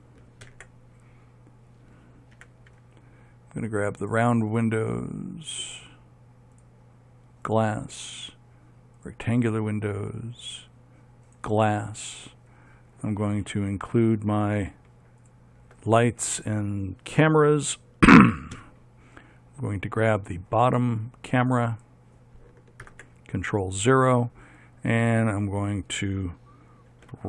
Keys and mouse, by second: 0.7 ctrl+KP_7, 2.5 z, 4.2-6.7 right drag, 6.7 middle click, 7.1-8.2 drag, 8.2 right click, 9.2-10.5 middle drag, 10.8 middle click, 11.4 right click, 12.0 middle click, 18.7 KP_3, 22.3 right click, 23.0 ctrl+KP_0.